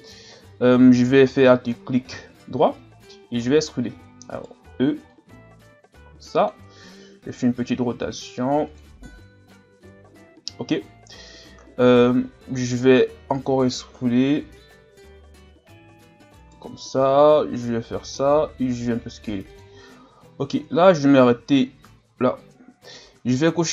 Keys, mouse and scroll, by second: 0.3-1.4 scroll up 1, 1.6 scroll down 3, 3.8 e, 5.1-7.0 drag, 7.0 r, 9.9-10.8 scroll up 1, 16.0 e, 17.2-18.4 drag, 18.4 s, 19.8-20.1 scroll down 2, 20.6-21.3 scroll down 2, 21.3 Tab.